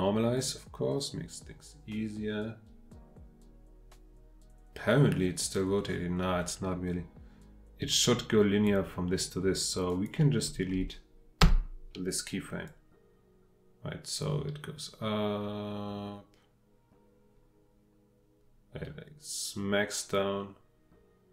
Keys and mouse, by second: 0.5-8.7 drag, 9.9 click, 11.4 Delete, 12.7-21.3 drag.